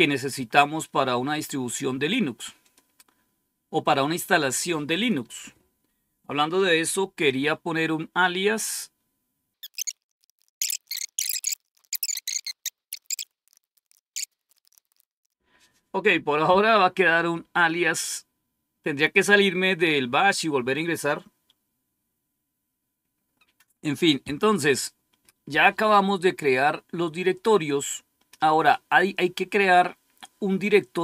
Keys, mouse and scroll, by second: 2.5 click, 4.8 click, 9.5-15.8 typing.